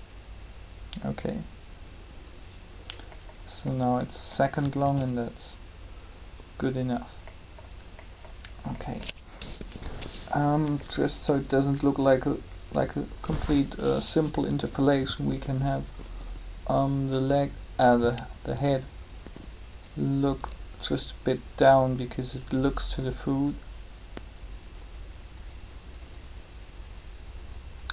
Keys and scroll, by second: 4.7 alt+a, 9.3 3, 14.4 r, 18.5 r.